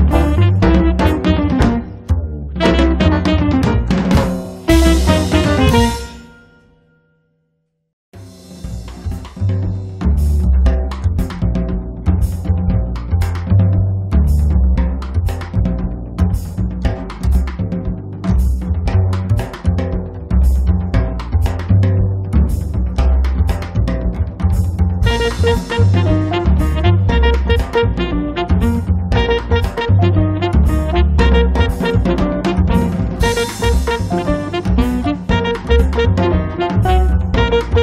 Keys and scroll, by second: 4.2 p, 6.0 e, 10.3 space, 10.9 p, 13.4 e, 18.9 space, 19.4 Escape, 28.1 m, 28.9 Right, 29.4 Left, 33.7 Left, 36.3 space.